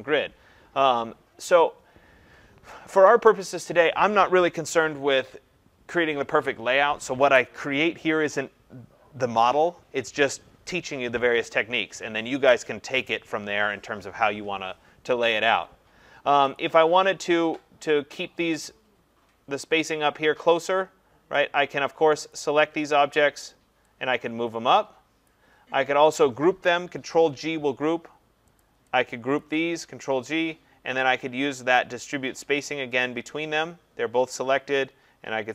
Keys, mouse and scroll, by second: 16.6 click, 22.3 click, 25.3 click, 27.1 ctrl+g, 28.6 click, 29.4 click, 29.8 ctrl+g, 33.0 shift+click.